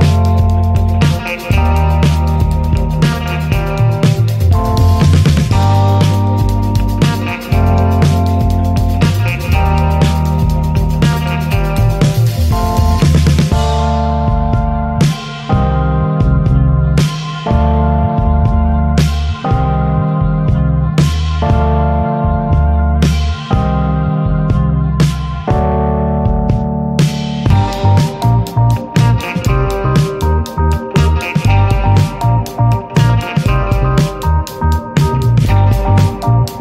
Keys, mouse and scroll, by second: 0.7 scroll down 2, 1.4-1.8 scroll down 1, 1.8-2.4 drag, 2.4-2.9 ctrl+shift+right drag, 2.9-3.8 middle drag, 3.8-4.1 scroll down 2, 4.1 click, 4.9 click, 5.8 ctrl+shift+click, 6.1-6.8 middle drag, 6.8 click, 7.9 click, 8.8 scroll up 1, 9.0-9.4 drag, 10.2-12.9 drag, 12.9 scroll up 3, 13.2-14.1 drag, 14.1-14.8 scroll down 3, 14.8 middle click, 15.0-16.1 drag, 17.7-18.3 scroll up 9, 18.7-19.9 drag, 19.9 scroll down 2, 20.1 middle drag, 20.3-20.7 scroll up 1, 20.7 middle click, 21.2-22.8 drag, 23.2-23.8 scroll down 5, 23.8 middle click, 24.4-25.4 drag, 26.2-27.1 drag, 28.1 scroll down 4, 28.2 middle click, 28.9 scroll up 2, 31.4 scroll up 1, 31.5-33.3 middle drag, 33.3-34.0 drag, 35.4-36.6 middle drag.